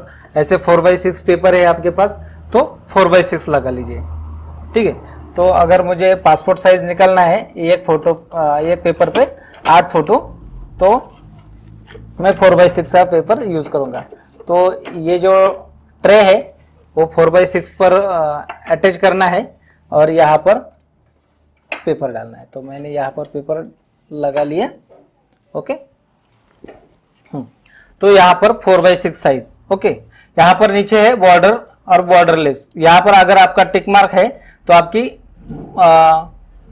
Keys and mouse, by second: 28.7 click, 32.6 click, 33.9 click.